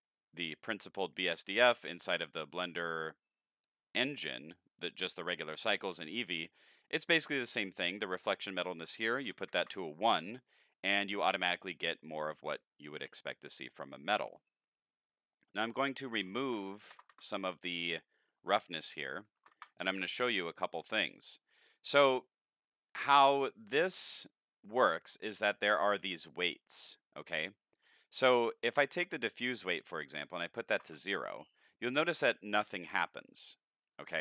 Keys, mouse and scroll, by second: 8.4 click, 15.6 click, 18.6 click, 20.6 click, 24.2-25.2 drag, 28.9 click.